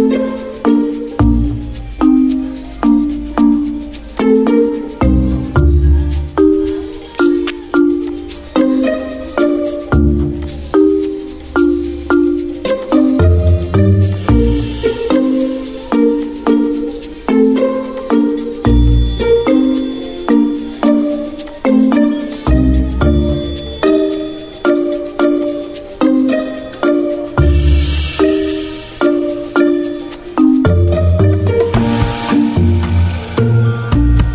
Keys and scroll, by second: 12.6 z, 29.0 ctrl+z, 30.1 y, 31.6 Delete, 32.6 z.